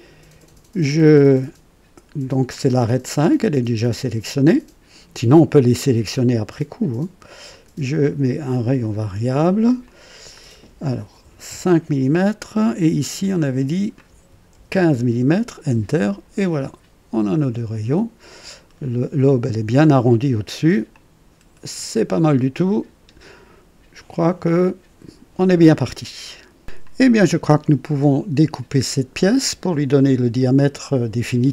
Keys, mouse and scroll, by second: 7.4 click, 8.5 click, 9.8 click, 11.4 KP_5, 13.2 click, 14.5 alt+KP_1, 14.7 alt+KP_5, 15.1 Return, 16.5-19.3 drag, 20.4-20.7 scroll down 1, 20.9 click, 22.4 right click.